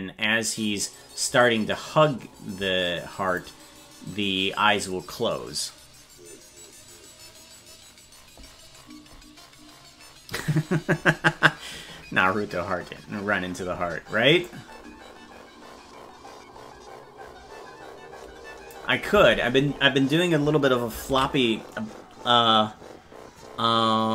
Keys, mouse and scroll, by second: 14.4-18.7 drag.